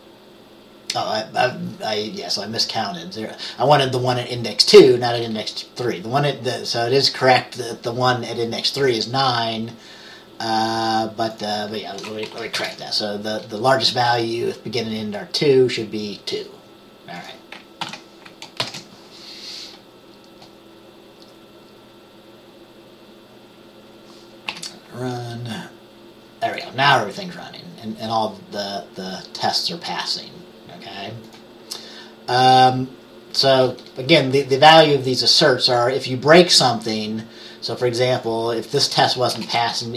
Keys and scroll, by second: 12.4 Right, 12.7 BackSpace, 17.9 ctrl+s, 18.7 ctrl+b, 24.6 F5, 39.5-39.9 BackSpace.